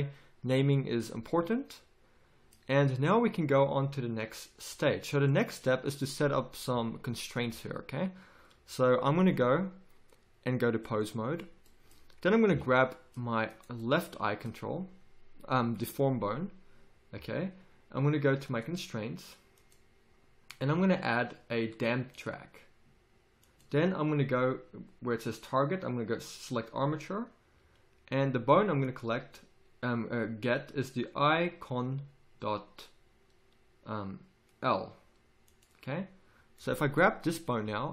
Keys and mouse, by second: 1.9-2.9 middle drag, 7.7-9.3 middle drag, 12.5 a, 18.5-37.6 drag, 37.6 g.